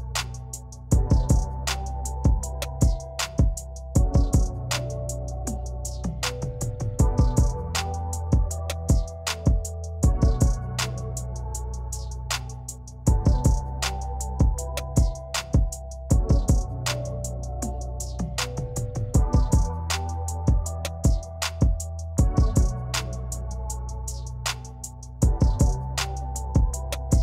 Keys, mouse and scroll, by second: 0.4 v, 0.7 click, 4.4 click, 12.2 click, 14.0 click, 20.6 click, 23.5 ctrl+z, 24.9 ctrl+shift+z, 25.6 click.